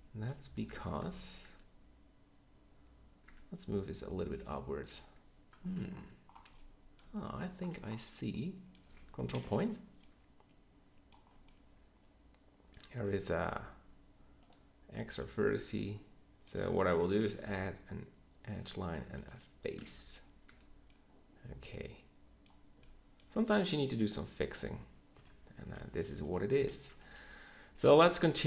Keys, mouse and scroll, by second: 0.7 Tab, 1.0 z, 1.5 Tab, 3.2 Tab, 4.8 Tab, 9.3 ctrl+KP_Decimal, 13.6 x, 15.3 x, 17.4 f, 19.8 f, 20.4 Tab, 23.2 Tab, 25.1 KP_3, 25.6 z, 27.0 b.